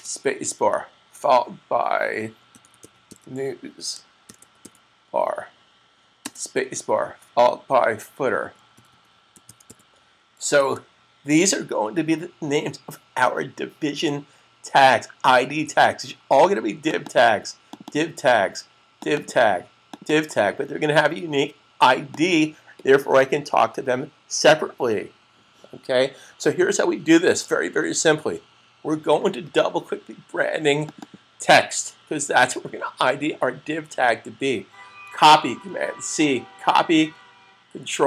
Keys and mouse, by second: 2.0-5.0 typing, 6.1 typing, 8.0-10.1 typing, 10.5 super+s, 16.8 click, 17.0 double click, 17.6 click, 17.8 double click, 18.9 click, 19.2 double click, 19.8 click, 19.9 double click, 22.0 click, 30.8 click, 30.9 double click, 36.8 super+c.